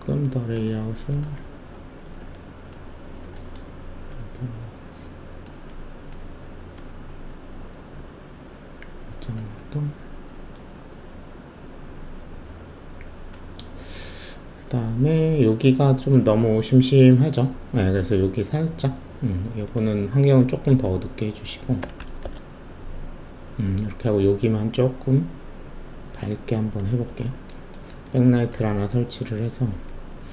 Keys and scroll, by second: 21.8 1, 22.2 Return.